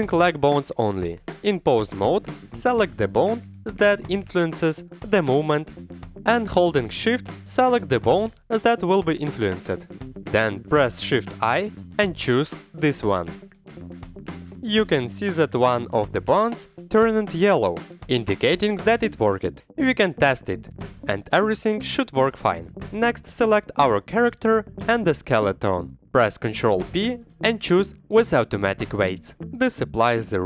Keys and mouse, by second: 0.9 shift+drag, 1.7 shift+drag, 2.8 ctrl+Tab, 4.2 ctrl+Tab, 6.5 Tab, 7.2 Tab, 8.2-9.5 drag, 10.0 click, 10.4 shift+click, 12.2 shift+click, 13.9 shift+i, 16.8 shift+click, 19.3 shift+i, 19.9 Escape, 19.9 g, 20.0 g, 20.5 Escape, 20.7 click, 21.1 g, 21.5 Escape, 21.6 a, 24.3 shift+click, 26.2 ctrl+p.